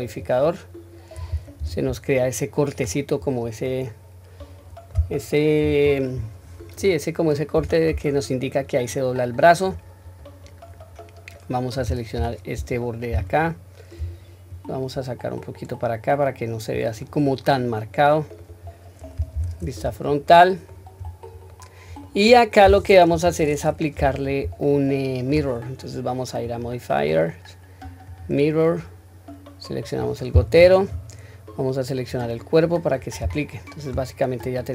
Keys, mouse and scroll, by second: 0.0 click, 1.6 Tab, 2.2-2.7 middle drag, 3.2-3.6 scroll down 1, 3.6-4.9 middle drag, 5.6-6.1 scroll up 3, 6.1-6.6 scroll down 1, 7.5 Tab, 8.0-8.9 middle drag, 9.1-9.6 middle drag, 13.1 alt+2, 13.3 alt+click, 14.5-16.7 drag, 17.0-18.5 middle drag, 18.6 scroll down 1, 19.4 Tab, 19.4-20.3 scroll down 3, 20.3-20.7 middle drag, 21.0-21.6 scroll up 2, 21.5-22.0 middle drag, 22.3-22.8 scroll down 1, 22.8 scroll down 1, 23.1 KP_1, 24.6-25.3 shift+middle drag, 26.4-28.2 drag, 29.8 click, 33.4-33.8 shift+middle drag, 34.4 click.